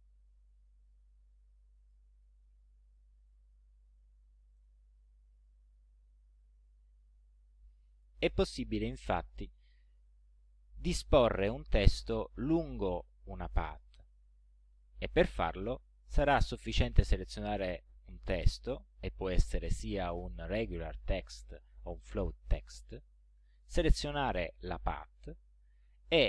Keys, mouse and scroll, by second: 0.5 click, 1.5 click, 2.7 click, 3.5 click, 4.6 right click, 6.4 click, 8.2 click, 9.4 click, 18.1 click, 23.4 shift+click.